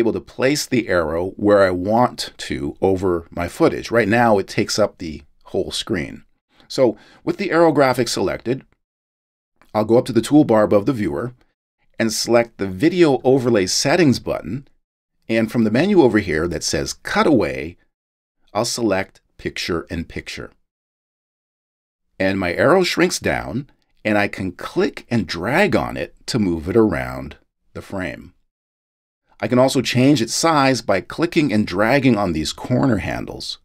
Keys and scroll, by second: 1.8 space, 6.5 space.